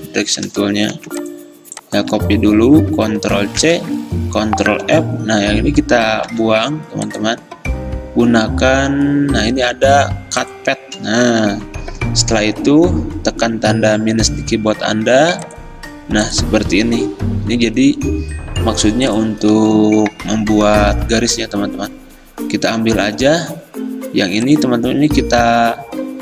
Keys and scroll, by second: 1.0 v, 2.2 ctrl+z, 3.7 ctrl+c, 4.8 ctrl+f, 6.4 a, 12.1 -, 23.6 a.